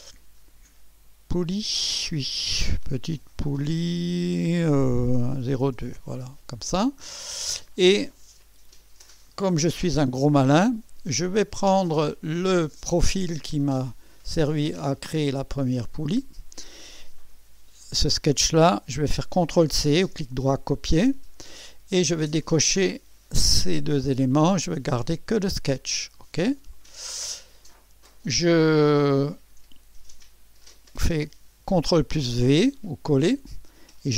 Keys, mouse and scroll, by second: 0.0-0.1 typing, 2.8-6.2 typing, 12.1 click, 20.9 ctrl+c, 22.4 click, 23.8 click, 26.7 click, 29.2 click, 32.4 ctrl+v.